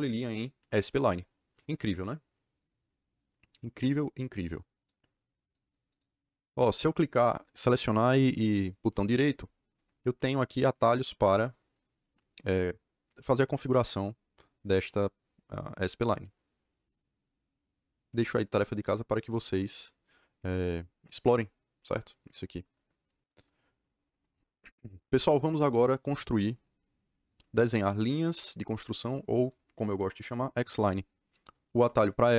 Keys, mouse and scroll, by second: 5.3 click, 5.8 right click, 23.2 click.